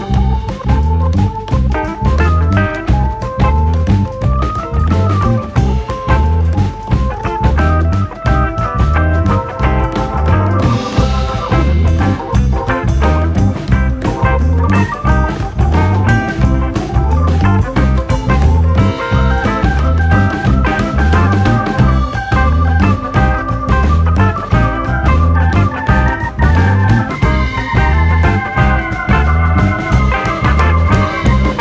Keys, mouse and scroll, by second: 0.5 click, 1.7 click, 1.9 scroll down 1, 2.1-3.7 middle drag, 3.7 click, 5.2 scroll up 1, 5.4-5.8 shift+middle drag, 5.8-8.2 drag, 8.9-9.9 drag, 11.2 click, 11.3-12.1 middle drag, 12.1 click, 12.8 click, 14.8 click, 15.1 click, 15.2-15.9 shift+middle drag, 15.9 shift+click, 16.3 shift+click, 18.1 click, 18.2 scroll down 1, 18.4-19.6 shift+middle drag, 19.6 click, 20.1-22.1 drag, 30.1 click, 31.1 click.